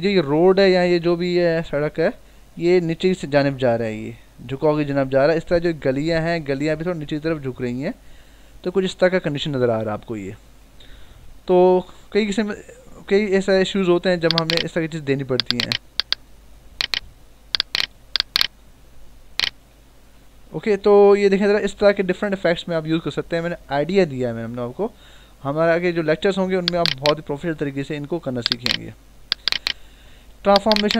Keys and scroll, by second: 11.2 ctrl+-, 12.1 ctrl+=, 20.7 ctrl+-.